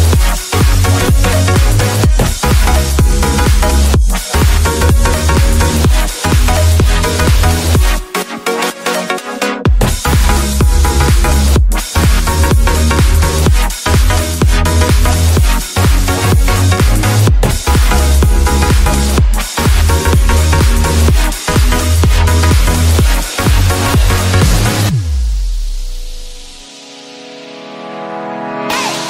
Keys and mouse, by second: 0.7 q, 2.2-2.5 drag, 2.5 middle click, 3.4-3.8 middle drag, 6.0 click, 7.0 shift+d, 8.3 click, 9.8 drag, 10.4 Tab, 10.6 click, 11.3 a, 11.6-12.3 drag, 14.1 /, 15.4 shift+click, 16.4 shift+click, 28.6 Tab.